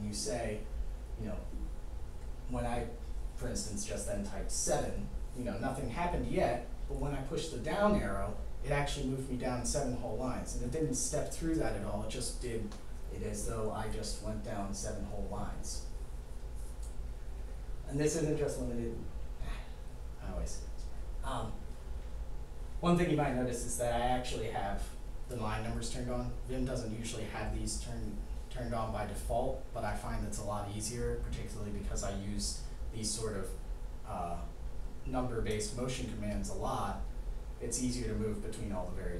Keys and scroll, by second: 7.7 Down.